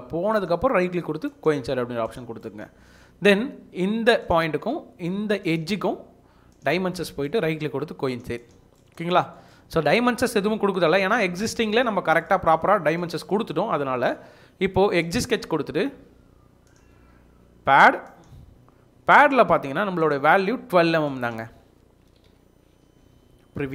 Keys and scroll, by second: 21.8-22.7 typing.